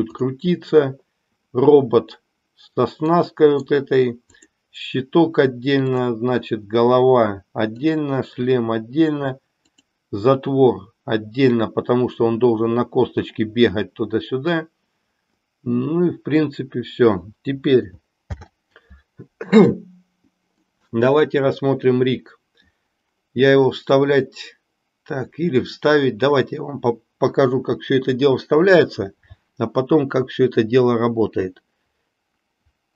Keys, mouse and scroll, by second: 0.0 click, 3.0 middle click, 4.4 click, 7.9 click, 9.6 click, 18.2 alt+h, 20.8 middle click.